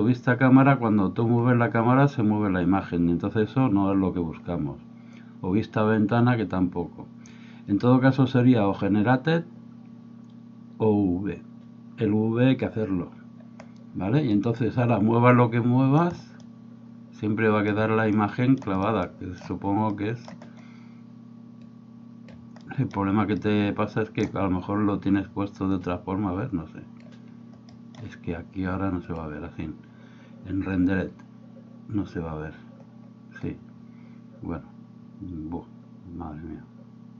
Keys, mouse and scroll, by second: 14.4-16.0 middle drag, 16.4-17.7 middle drag, 18.1 middle click, 19.1 middle click, 19.9 middle click, 21.7 click, 22.7 middle click, 23.4 middle click, 25.7-27.1 drag, 27.6 middle click.